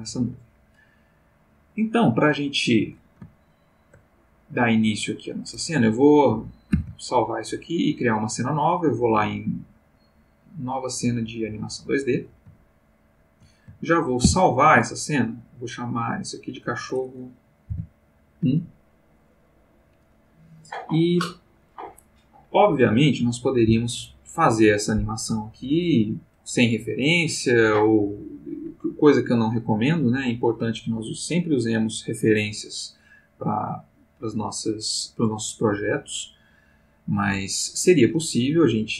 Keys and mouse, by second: 3.4-4.1 ctrl+middle drag, 6.7 ctrl+s, 7.8 click, 11.2 click, 12.7 ctrl+middle click, 14.2 ctrl+s, 15.9 click, 17.7 =, 19.4 click.